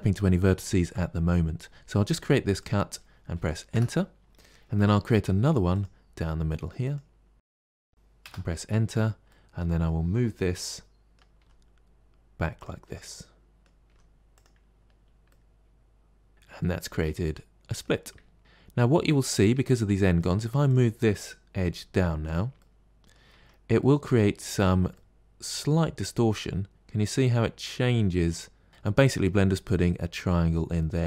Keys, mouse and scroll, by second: 4.7 k, 8.7 click, 9.1-11.3 middle drag, 11.3 g, 12.7-13.7 middle drag, 13.7 g, 14.8 scroll down 3, 15.1-16.3 middle drag, 16.3 scroll down 2, 16.5-18.0 middle drag, 18.0-18.4 scroll up 3, 18.4-19.4 middle drag, 19.4 Tab, 19.8 middle click, 20.5 click, 21.5 g, 22.5 middle click, 23.2 Tab, 23.7-24.2 middle drag, 24.2-25.5 scroll up 6, 25.6-28.6 middle drag, 30.1-31.0 middle drag.